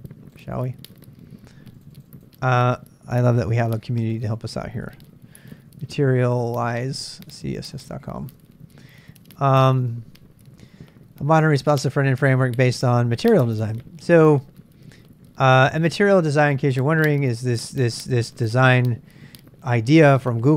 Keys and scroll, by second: 3.4-8.6 typing.